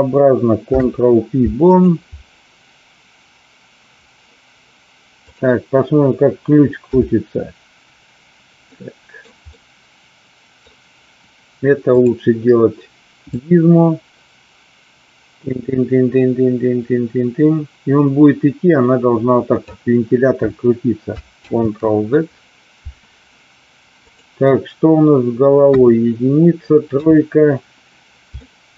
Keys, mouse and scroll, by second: 0.6 ctrl+p, 5.2 drag, 6.7 KP_7, 8.8-9.2 middle drag, 9.5-10.6 middle drag, 11.8 click, 13.2-19.6 drag, 21.5 ctrl+z, 24.0 click, 25.6 KP_1, 26.8 KP_3, 28.5 shift+middle click.